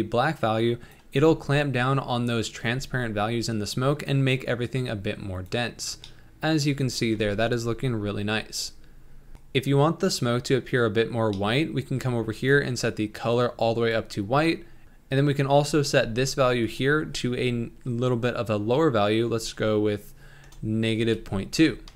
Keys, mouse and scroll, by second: 4.6-6.0 drag, 6.0-7.2 middle drag, 7.2 ctrl+s, 9.3-11.6 scroll down 2, 11.6-13.3 scroll up 3, 13.3 click, 16.7-21.9 drag.